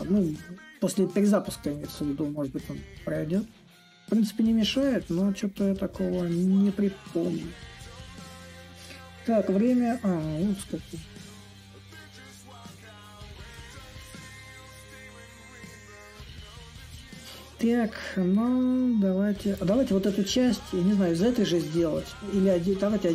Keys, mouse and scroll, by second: 2.1-6.3 drag, 6.3 a, 7.3-10.9 drag, 10.9 s, 11.9-17.0 drag, 18.1-23.1 drag.